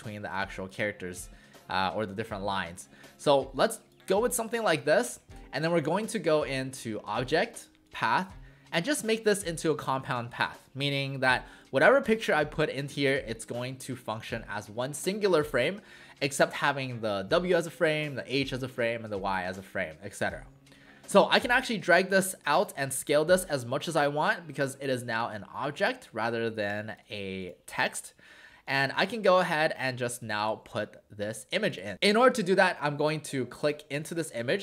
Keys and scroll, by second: 0.3 space, 11.5 space, 30.2 space.